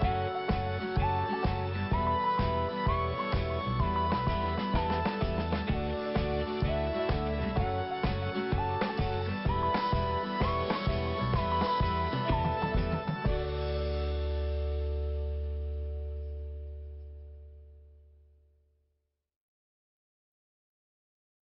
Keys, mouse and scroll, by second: 0.4 click, 1.8 scroll down 1, 2.9 click, 3.0 click, 3.3 click, 3.4 double click, 3.9 double click, 7.5 scroll up 1, 8.7 click, 8.8 click, 10.0 scroll down 1, 11.9 click, 16.3 scroll up 1, 16.7 click, 16.8 click, 18.2 click, 18.3 click, 18.6 click, 18.7 click, 19.4 click, 19.5 click, 20.0 click, 20.1 click, 20.3 click, 20.4 double click, 20.8 double click, 20.9 double click.